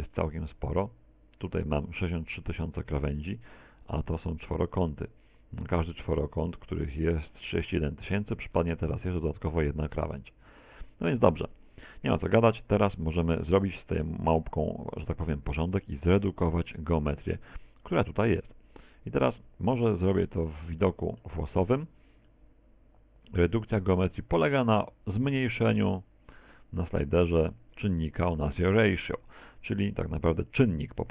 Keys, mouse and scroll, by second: 8.8 Tab, 17.4 Tab, 20.6 z, 21.0 middle click, 22.4 middle click, 23.6 middle click, 27.1 z, 27.5 z, 28.0 scroll up 2, 28.2 middle click, 28.2-29.2 scroll down 1, 30.0 middle click, 30.4 middle click.